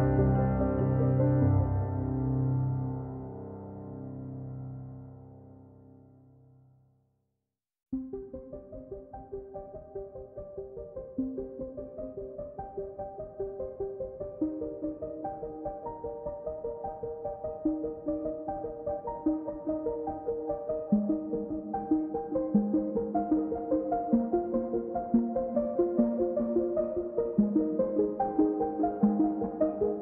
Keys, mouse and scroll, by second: 1.3 click, 1.6-2.1 scroll down 3, 2.1 click, 2.5-3.2 scroll up 2, 3.5-4.6 drag, 7.9 click, 9.4-10.6 drag, 10.9-11.2 scroll down 7, 11.2-11.6 scroll up 2, 11.6 click, 12.6-14.5 drag, 14.5-14.9 scroll up 4, 14.9-16.8 drag, 18.0-19.2 drag, 22.0-23.7 drag, 26.5-27.6 drag, 27.8-30.0 drag.